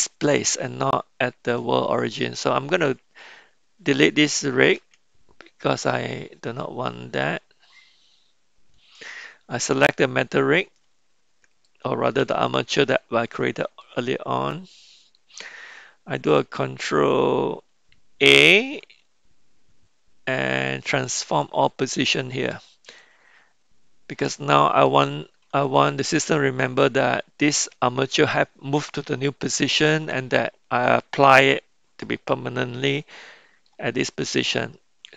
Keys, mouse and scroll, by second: 4.9 x, 8.9 click, 12.2 KP_Decimal, 13.8-15.2 middle drag, 18.5 ctrl+a, 23.0-24.8 middle drag, 25.7-26.1 shift+middle drag, 26.3 middle click, 32.7-33.7 middle drag, 33.7 scroll down 1.